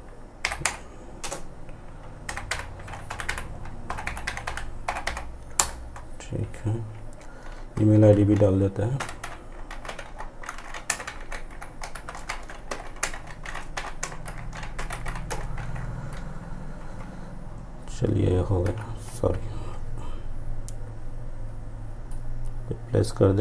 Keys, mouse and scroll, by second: 0.2 space, 8.0 typing, 10.2-11.7 typing, 14.3 typing, 15.9 ctrl+s, 21.1-23.4 drag.